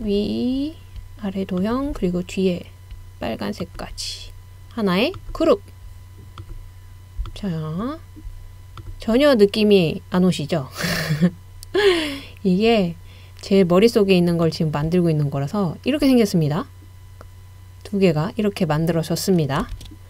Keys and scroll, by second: 19.7 super+z.